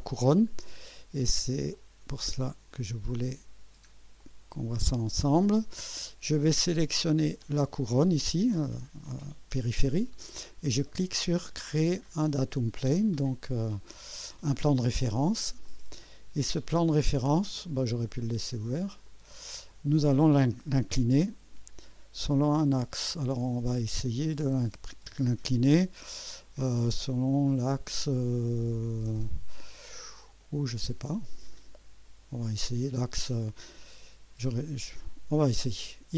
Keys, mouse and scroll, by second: 0.5 scroll up 1, 0.9-1.5 right drag, 1.7-2.7 drag, 3.1 scroll up 1, 3.5-3.8 scroll down 1, 4.2-6.5 drag, 7.4 click, 12.0 click, 15.6 click, 17.3-17.7 scroll down 1, 18.8 click, 26.2-30.3 drag, 30.4 click.